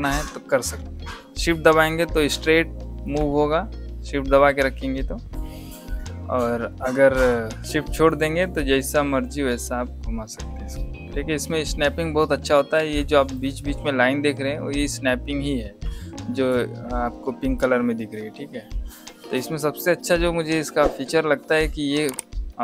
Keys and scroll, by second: 12.7 ctrl+z.